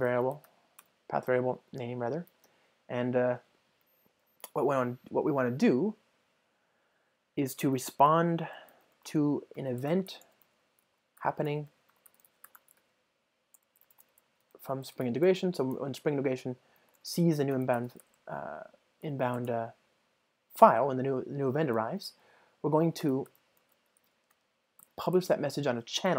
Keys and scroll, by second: 1.6 Return, 13.6 Return, 15.2 ctrl+space, 17.0 Return, 17.9 alt+Return, 19.0 Return.